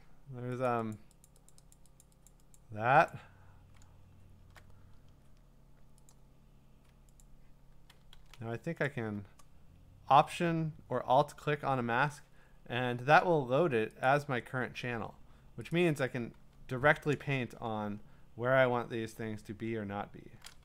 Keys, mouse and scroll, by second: 0.7 click, 0.9 click, 1.2 click, 1.5 click, 1.7 click, 2.2 click, 2.4 click, 2.5 click, 3.1 click, 4.0-4.4 scroll down 9, 6.1 click, 7.0 scroll, 7.2 ctrl+click, 8.1 ctrl+d, 8.9 alt+click, 12.3 alt+click, 12.3 scroll, 14.1 click, 15.7 click, 17.2-18.0 scroll, 18.9 scroll, 19.0-19.4 scroll down 7, 19.8-20.3 scroll down 4.